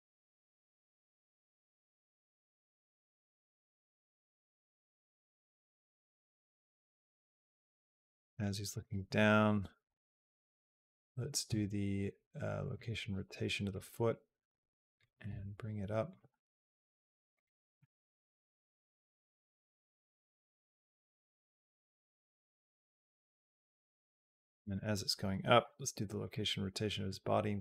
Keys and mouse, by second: 1.6-7.7 drag, 8.5 click, 9.7 i, 13.5-14.8 drag, 15.1 g, 16.1 r, 18.1-23.9 drag, 24.4 click, 25.4 i, 26.9 click.